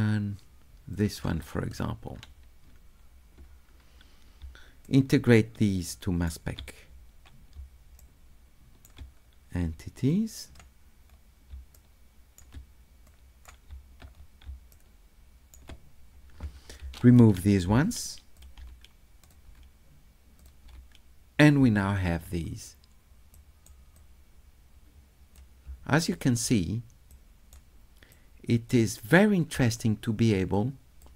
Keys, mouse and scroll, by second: 1.0 ctrl+click, 1.7 click, 4.4 s, 4.8-6.2 middle drag, 7.1 middle click, 7.1 scroll up 2, 7.2-7.6 scroll down 2, 7.6 s, 8.0 right click, 9.2 middle click, 10.1 click, 11.1 middle click, 11.5 s, 11.7 right click, 13.0 click, 13.7 s, 14.2 middle click, 14.5 s, 14.7 right click, 17.1 click, 18.4 click, 20.4 click, 23.4 right click, 24.0-25.4 drag, 26.0 shift+right click, 27.1 shift+right click, 28.1 shift+right click, 30.6 click.